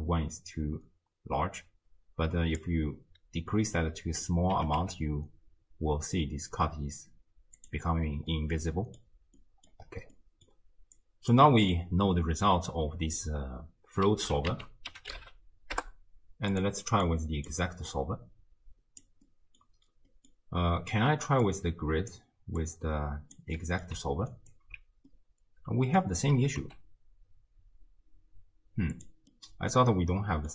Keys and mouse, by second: 3.7 middle click, 4.5 r, 8.4 middle click, 9.4 middle click, 10.2 middle drag, 10.3 click, 10.3 right click, 11.0-11.3 drag, 11.5 middle drag, 14.5 ctrl+a, 17.1-17.5 middle drag, 18.0-19.1 middle drag, 19.3-19.7 middle drag, 20.1 middle drag, 21.5-22.2 drag, 22.6-23.4 drag, 23.6 middle drag, 25.3-26.1 middle drag, 26.3 r, 29.3-30.5 middle drag.